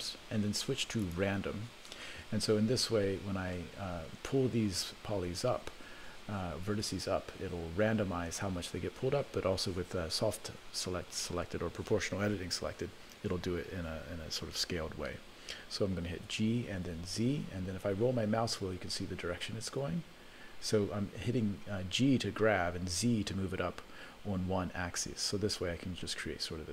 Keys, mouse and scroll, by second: 2.4 scroll down 1, 3.7-4.0 scroll down 5, 4.0-5.3 scroll up 6, 16.2 g.